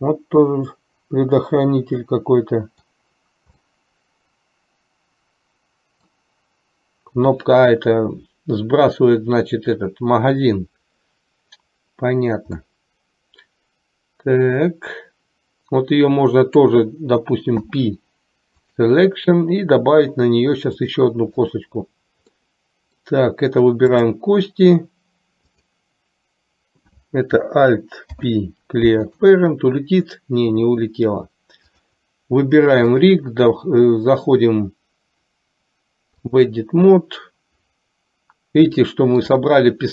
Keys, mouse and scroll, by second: 3.1-3.8 scroll down 1, 3.8-4.7 scroll up 1, 4.7-6.3 middle drag, 12.7-16.9 middle drag, 17.7 p, 20.9-21.8 drag, 22.6-23.3 middle drag, 25.6 click, 28.1 alt+p, 33.1-36.7 drag, 38.9 shift+middle click.